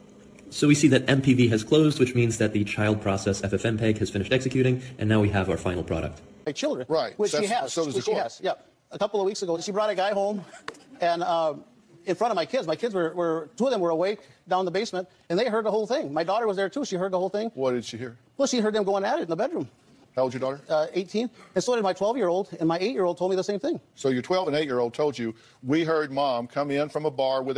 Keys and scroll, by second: 0.5 ctrl+n, 0.8-1.5 typing, 3.0-4.1 typing, 4.0 super+l, 4.1 super+l, 4.2 super+l, 4.3 super+l.